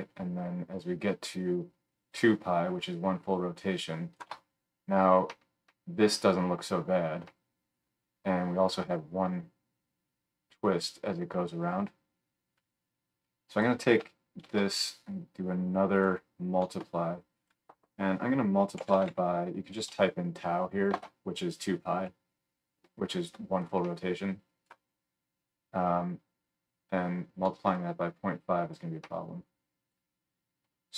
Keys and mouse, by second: 13.6-30.9 shift+drag, 14.4 shift+d, 17.3-30.9 middle drag, 17.3-30.9 right drag.